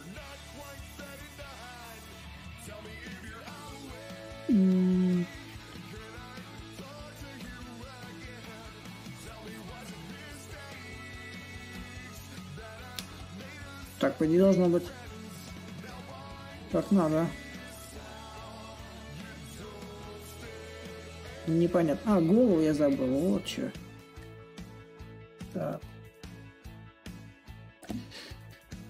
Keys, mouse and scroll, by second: 0.0 ctrl+click, 1.8-6.8 drag, 7.2-11.3 drag, 11.5 ctrl+click, 12.8-21.3 ctrl+drag, 21.8-23.7 drag, 24.0 ctrl+click, 25.0-28.8 drag.